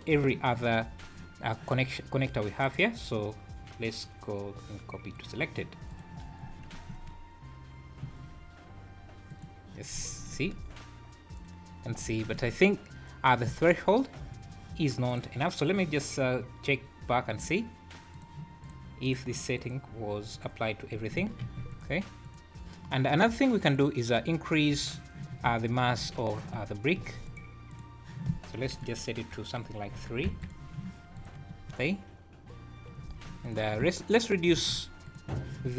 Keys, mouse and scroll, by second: 2.6 right click, 5.9 click, 6.2 scroll down 4, 6.9 space, 8.1 Escape, 9.3 click, 9.9 scroll up 5, 10.3 space, 11.9 Escape, 12.3 space, 13.5 Escape, 15.1 click, 18.6 click, 19.1 click, 19.6 click, 20.4 click, 21.4 shift+g, 23.7 click, 26.9 shift+g, 28.7 click, 31.1 click, 31.5 space, 33.0 Escape, 33.4 click, 34.5 shift+g.